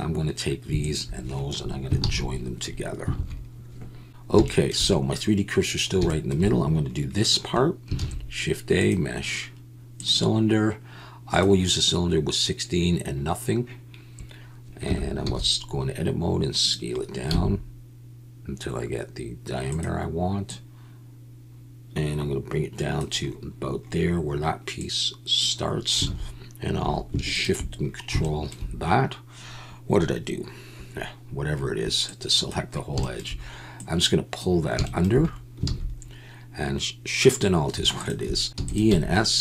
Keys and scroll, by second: 2.0 ctrl+j, 3.1 alt+a, 4.3 KP_1, 8.0 shift+a, 14.8 Tab, 15.2 s, 17.3 s, 26.0 alt+a, 26.8 2, 35.7 alt+a, 38.4 ctrl+z, 38.4 1, 38.5 e, 38.9 s.